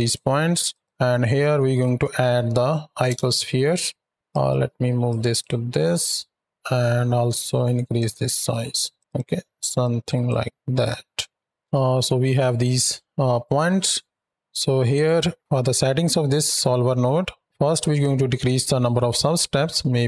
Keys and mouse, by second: 0.5 drag, 4.3 right click, 5.1 drag, 5.8 click, 7.3 click, 8.1-8.8 drag, 9.6 drag, 10.1-11.5 drag, 11.5 shift+Right, 11.5 shift+Left, 11.5 space, 11.8 alt+a, 14.8 click, 16.1-17.0 middle drag, 17.6-20.0 drag.